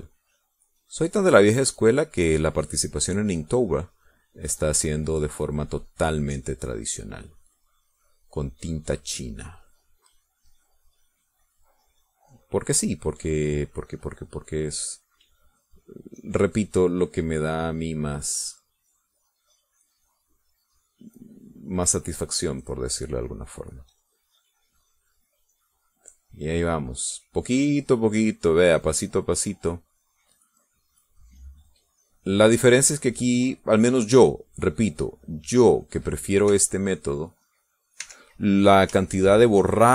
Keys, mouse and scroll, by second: 0.0 ctrl+shift+click, 1.3 click, 3.1 click, 5.2 click, 6.0-20.0 drag, 20.2-24.5 drag, 25.9 click, 26.4-36.3 drag, 36.5 click, 37.7 e, 38.0-39.2 drag, 39.2 e, 39.5 middle click, 39.8 click.